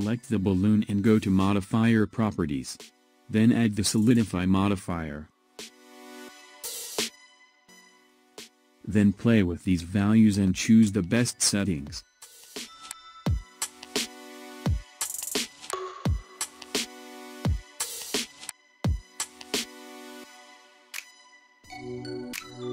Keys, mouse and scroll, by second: 3.1 click, 7.6 click, 9.5-9.9 scroll up 1, 9.9-12.9 middle drag, 16.6-21.6 drag.